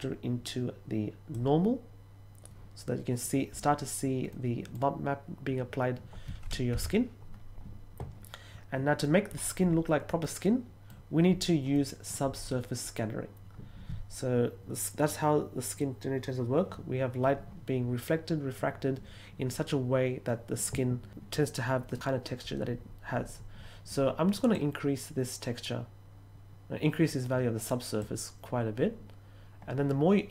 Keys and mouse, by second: 0.0-1.3 drag, 4.2-4.7 middle drag, 10.2 middle click, 11.7 middle click, 24.5-27.9 drag.